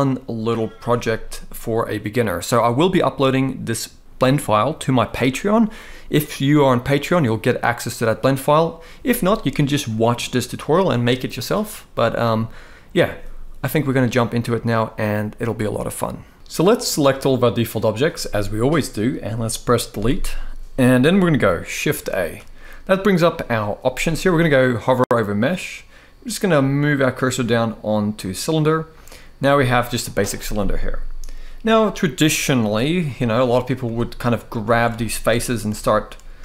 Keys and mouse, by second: 16.3 z, 16.8-17.6 drag, 19.7 Delete, 20.9 middle click, 21.8 shift+a, 33.1 middle click, 33.5 Tab, 34.5 alt+a, 35.4 e.